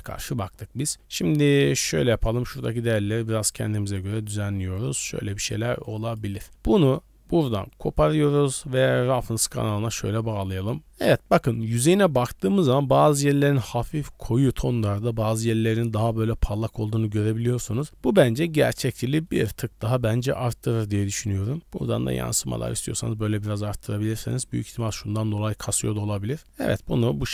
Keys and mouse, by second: 1.7 click, 2.5-4.1 drag, 4.7 click, 5.9-6.5 drag, 7.6-8.9 drag, 11.1-11.6 middle drag, 11.9-13.6 middle drag, 15.0-15.9 middle drag, 17.3 middle click, 19.3 middle drag, 20.9-22.7 drag, 24.8 click, 25.3-26.3 middle drag, 26.4 middle drag, 26.9 middle click.